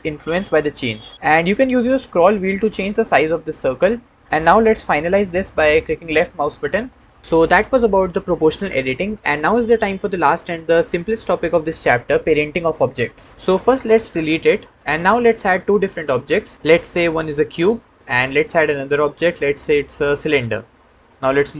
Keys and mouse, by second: 6.7 click, 7.3 Tab, 14.2 x, 15.1 shift+a, 18.0 shift+a, 21.3 g.